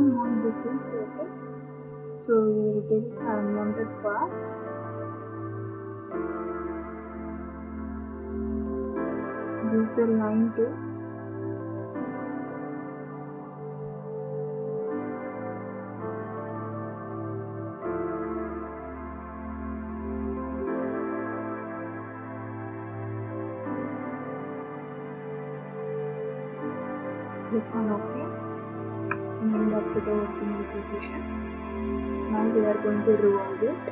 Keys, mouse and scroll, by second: 0.2-0.8 scroll, 1.7 click, 7.4 click, 9.4 click, 11.4 click, 13.1 click, 14.6 click, 16.0 Escape, 18.3 click, 20.7 click, 23.1 click, 24.1-25.5 scroll, 25.5-26.9 scroll, 26.9-27.6 scroll down 7, 27.6 click, 29.7 ctrl+d, 29.7 scroll, 33.4 click.